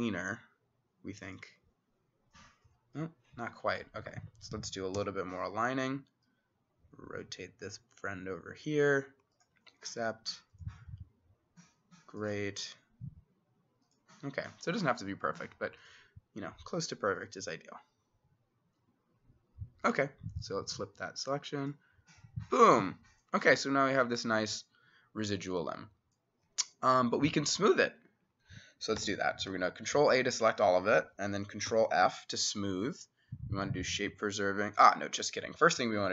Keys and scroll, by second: 4.2 Escape, 5.0 t, 29.0 ctrl+a, 31.7 ctrl+f, 35.0 Escape.